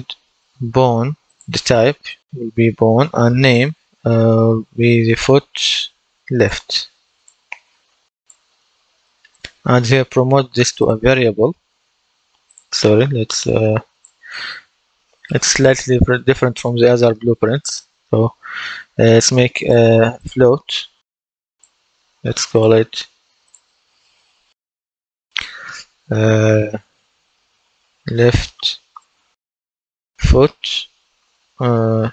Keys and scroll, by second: 4.0-5.4 typing, 27.0-30.3 typing, 32.0-32.1 typing.